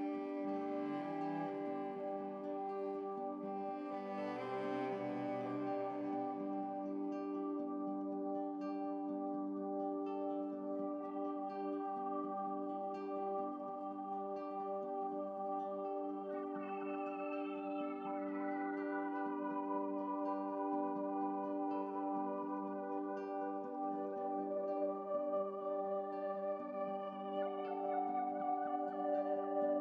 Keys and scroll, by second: 0.2 ctrl+z, 0.4 ctrl+z, 28.7 Left.